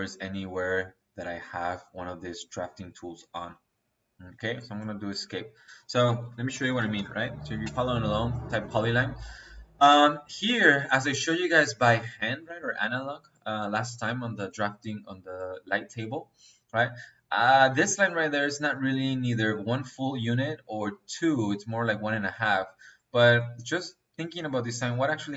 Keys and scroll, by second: 3.5 Escape, 5.7 Escape, 6.3-7.5 typing.